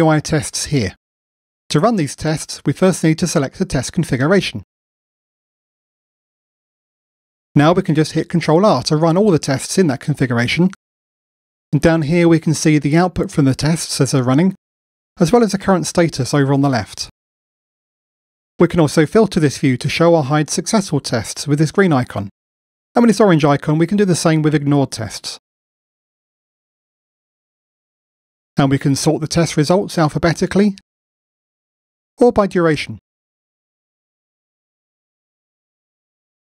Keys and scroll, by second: 8.2 ctrl+r.